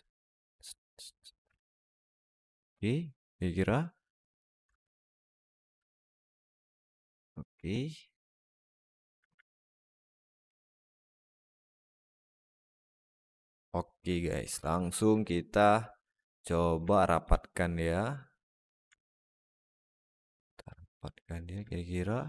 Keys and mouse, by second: 0.0-1.2 drag, 1.3 Tab, 1.7-3.2 alt+middle drag, 4.5 Tab, 6.0 click, 6.9 Tab, 7.1-8.9 alt+middle drag, 9.3 alt+middle drag, 10.4-12.4 alt+middle drag, 12.6 s, 13.5-13.8 alt+middle drag, 14.3 Tab, 14.6 a, 15.2 alt+middle click, 15.8 click, 16.8 alt+middle click, 17.6 click, 18.8 alt+middle click, 19.4 alt+shift+middle click, 19.7-21.4 alt+middle drag.